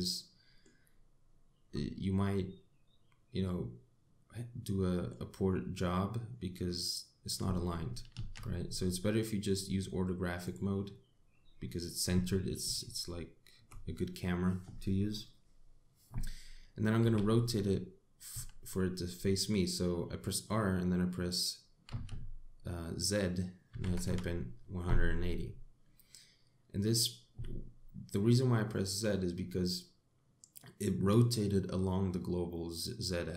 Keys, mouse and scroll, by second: 1.8-2.1 scroll down 2, 2.3-2.8 scroll up 2, 2.8 middle click, 6.4 middle click, 8.8 ctrl+z, 9.4-10.1 scroll down 3, 11.1 click, 12.0 scroll up 2, 12.6 scroll down 1, 13.4 shift+middle click, 17.7 r.